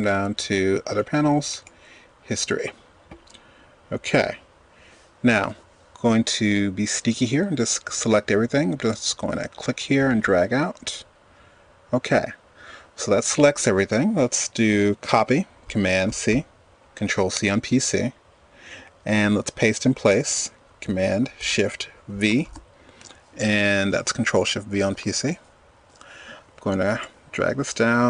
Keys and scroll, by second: 16.0 super+c, 21.5 shift+super+v.